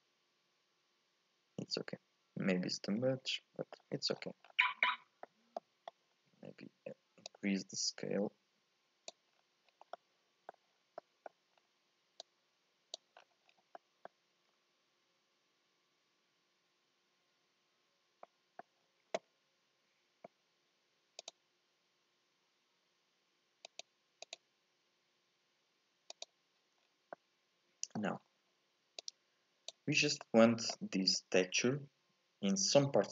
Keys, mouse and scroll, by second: 4.2-4.9 scroll down 8, 4.9-6.2 middle drag, 6.2-7.3 scroll up 2, 7.3-9.4 drag, 9.4-9.8 scroll down 3, 10.0 middle click, 10.8 scroll up 3, 11.0 middle click, 11.6-12.3 scroll up 1, 12.3 click, 13.2-13.8 scroll down 8, 13.8-16.9 middle drag, 18.3 middle click, 18.8-21.2 scroll up 2, 21.3-22.3 scroll up 2, 26.8-27.2 scroll down 4, 27.2-28.3 middle drag, 28.3-29.0 scroll up 4, 29.0-30.3 drag, 30.3-33.1 middle drag.